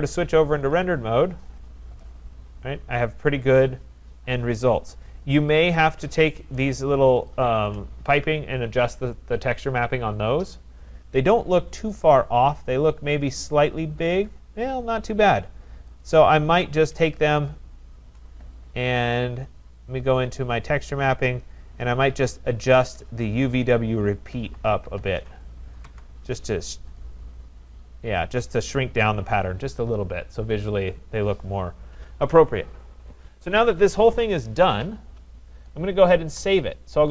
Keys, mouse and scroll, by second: 0.7 click, 1.8 middle click, 1.9 middle click, 4.7 right click, 5.7 click, 6.7 scroll, 7.3 shift+click, 11.4-12.1 scroll, 12.1 click, 12.4 middle click, 13.0 middle click, 13.7 scroll, 16.2 click, 17.6 shift+click, 20.6 click, 23.0 click, 23.5 click, 24.1-25.3 typing, 25.9 Tab, 27.2 click, 31.9 click, 34.5-34.8 scroll, 35.5 scroll, 36.8 middle click.